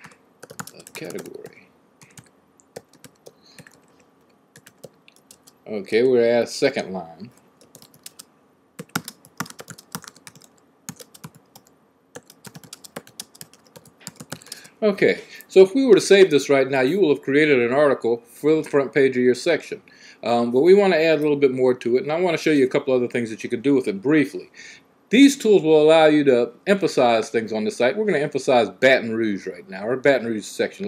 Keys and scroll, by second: 0.0-5.0 typing, 7.3-14.7 typing.